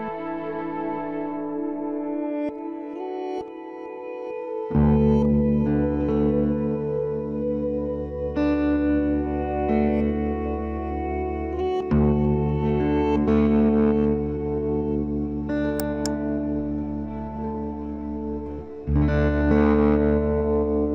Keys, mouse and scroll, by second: 0.5 ctrl+r, 1.9-4.0 right drag, 3.1 b, 4.0 click, 4.3 z, 5.0 z, 6.1-8.1 middle drag, 8.2 g, 10.2 b, 11.0-13.4 drag, 11.4 b, 13.2 KP_3, 15.2 c, 16.7-18.4 drag, 18.3 c, 18.4-19.6 middle drag.